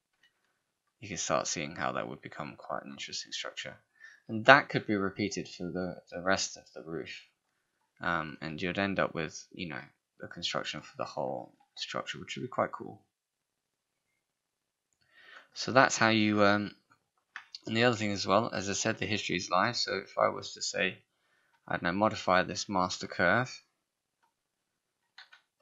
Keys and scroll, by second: 11.5 shift+h.